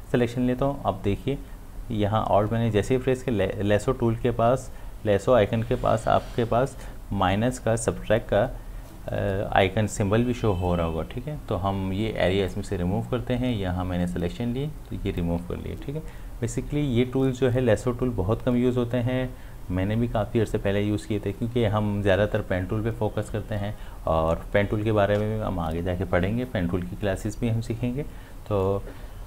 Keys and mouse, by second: 12.5-18.0 alt+drag.